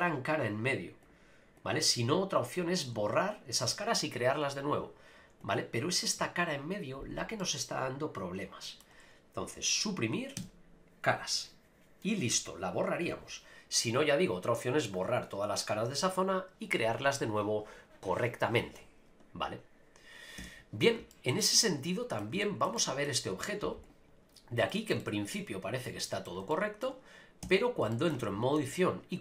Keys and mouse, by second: 1.6 click, 5.4 click, 7.4-8.8 middle drag, 10.4 x, 14.6 click, 15.0 click, 20.4 Tab, 21.1 shift+middle click, 21.4-22.2 middle drag, 22.4 shift+middle drag, 22.8 middle click, 24.7 shift+middle drag, 25.0-26.2 middle drag, 26.5-26.8 shift+middle drag, 27.4 Tab, 27.9 shift+middle click, 28.6 ctrl+r.